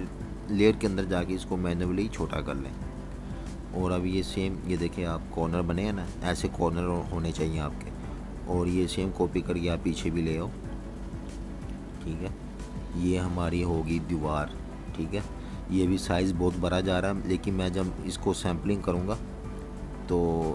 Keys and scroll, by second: 3.1-4.5 typing, 5.0 super+y, 5.6 super+-, 6.3 super+-, 6.7 typing, 8.2 Delete, 12.7 super+-, 19.5-20.5 typing.